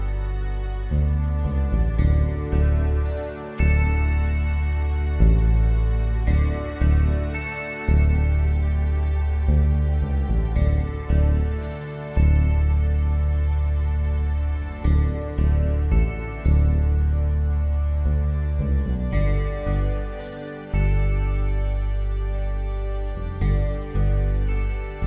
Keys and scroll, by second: 7.4 ctrl+t, 11.7 Up, 12.2 Right, 12.4 Return, 12.6 Down, 14.0 space, 21.8-24.1 typing.